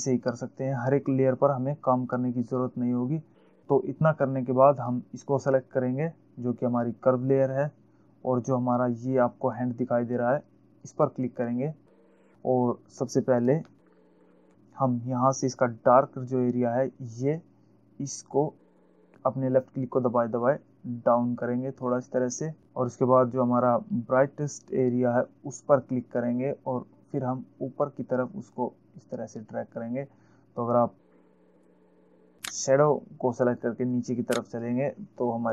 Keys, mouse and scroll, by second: 5.2 click, 11.2 click, 14.1 alt+scroll up 1, 14.8-15.3 scroll up 1, 19.0 click, 27.1 click, 34.0 click.